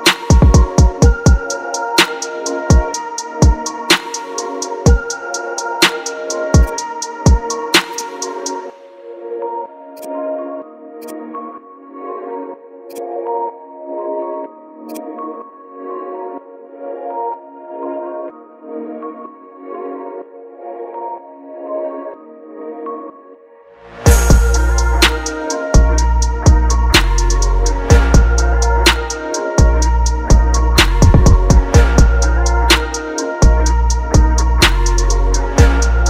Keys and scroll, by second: 1.7 ctrl+t, 2.1 Left, 2.5 Left, 2.8 Down, 3.2 Left, 4.1 KP_Decimal, 4.3 Return, 7.1 ctrl+t, 12.2 ctrl+t, 14.4 Return, 18.0 ctrl+t, 19.2 Down, 22.5 Down, 28.6 Return, 32.4 ctrl+KP_Subtract, 33.2 ctrl+KP_Subtract.